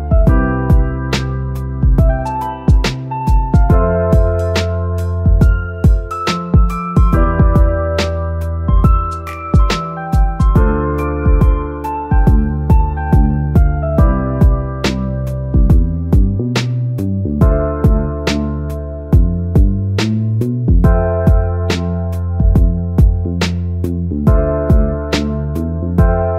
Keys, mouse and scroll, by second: 0.6-3.2 drag, 5.2 Tab, 6.2-8.3 middle drag, 8.3 click, 8.4-9.9 middle drag, 9.9 click, 16.2 Tab, 16.7 scroll down 2, 17.4 Tab, 17.8-18.5 scroll down 3, 18.5-19.3 scroll up 2, 19.3 click, 19.3-19.7 scroll up 1, 20.5-21.6 drag.